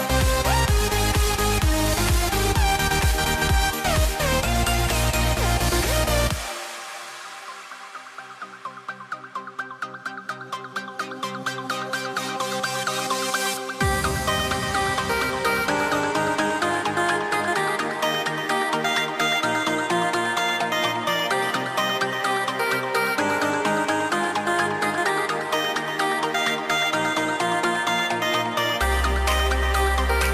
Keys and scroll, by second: 0.9 a, 6.2 super+z, 7.1 super+z, 7.2 a, 9.7 a, 11.0 a, 14.3 a, 15.7 a, 20.8 a, 23.8 v, 27.1 v, 29.3 super+z.